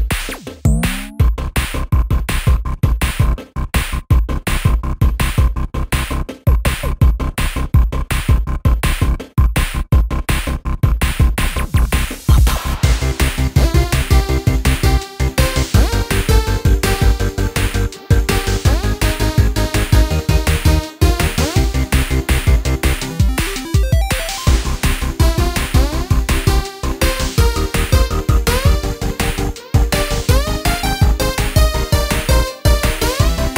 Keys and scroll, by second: 1.2-3.6 typing, 2.2 super+space, 24.9-25.3 typing.